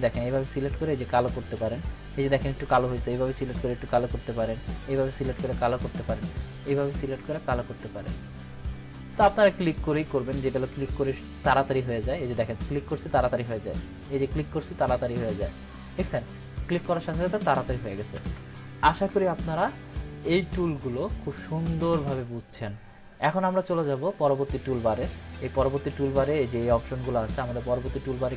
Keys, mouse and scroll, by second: 3.4-4.1 drag, 14.1 click, 17.9 click, 20.2-21.2 drag.